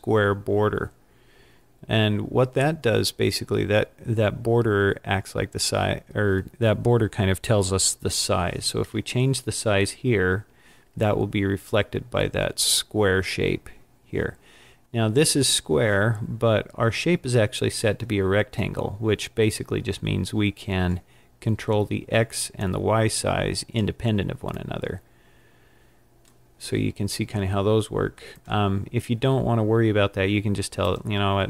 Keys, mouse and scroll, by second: 0.2 scroll down 2, 1.0-3.0 scroll down 21, 3.6 scroll up 2, 11.9-13.6 scroll up 11, 22.6 click, 24.6 click, 24.7 click, 28.4 click.